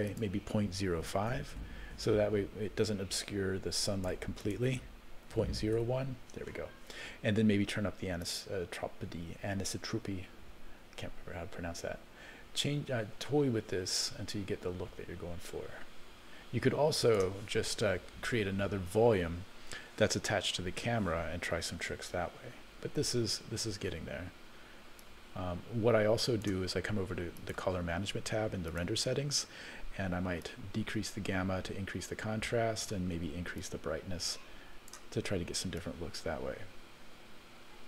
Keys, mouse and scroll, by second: 0.1-1.8 drag, 3.2-4.2 drag, 4.4-6.2 drag, 8.2-17.2 drag, 21.9 alt+a, 22.6-23.1 scroll down 1, 23.1-23.4 scroll up 1, 25.0-26.5 drag, 27.4 click, 28.7 click, 30.4-32.9 drag, 33.6-35.0 drag, 35.8-37.8 drag.